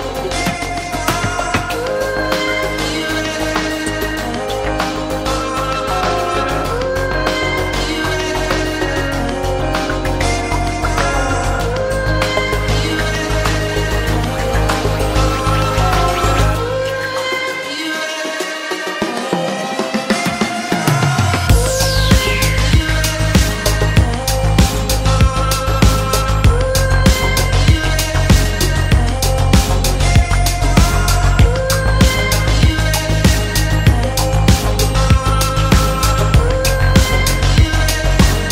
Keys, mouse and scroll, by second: 1.3 scroll down 2, 2.3-3.5 scroll up 3, 2.6 middle click, 3.5 middle click, 3.7 middle click, 5.3 click, 7.6 click, 10.2 click, 10.6 scroll down 2, 13.9 click, 14.8 KP_5, 14.9 KP_Enter, 17.4 click, 18.3 BackSpace, 18.9 KP_5, 19.2 KP_Enter, 21.9 click, 22.8 KP_6, 23.0 KP_Enter, 25.2 click, 27.0 click, 27.8 click, 28.3 click, 28.8 KP_Subtract, 30.8 middle click, 31.3 click, 31.6 click, 31.9 middle click, 32.2 click, 33.9 click, 36.0 click, 36.8-38.2 drag.